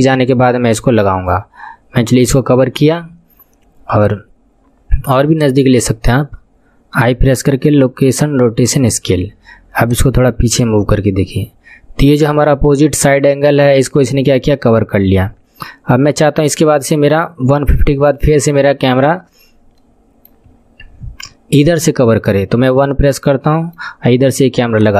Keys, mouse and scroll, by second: 5.3-6.9 drag, 6.9 i, 9.9-12.9 drag, 19.8 middle click, 20.5-21.1 scroll up 13, 22.6 KP_1, 23.2 scroll up 4, 23.6-24.9 shift+middle drag, 24.7-24.9 drag.